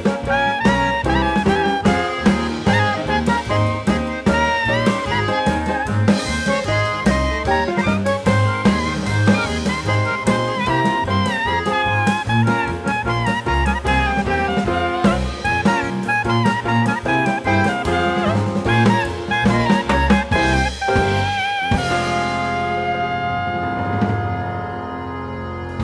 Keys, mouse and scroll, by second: 1.8 click, 2.7 space, 2.8 click, 3.6 click, 4.4 click, 5.1 click, 5.6 click, 6.7 space, 6.8 click, 7.4 click, 9.3 click, 12.3 click, 12.9 click, 13.9 click, 14.8 click, 15.5 click, 15.7 click, 15.9 click, 16.1 click, 17.3 click, 18.5 click, 19.8 click, 20.8 click, 21.5 7, 22.9 click, 23.9 click, 24.4 click, 24.9 click, 25.2 click.